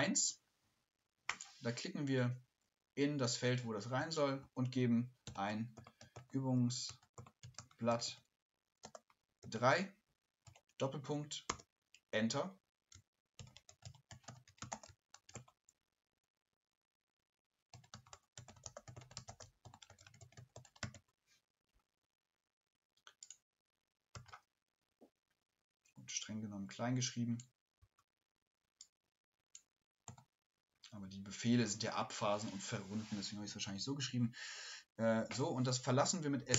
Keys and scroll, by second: 4.4-11.6 typing, 12.9-15.9 typing, 19.4-21.4 typing.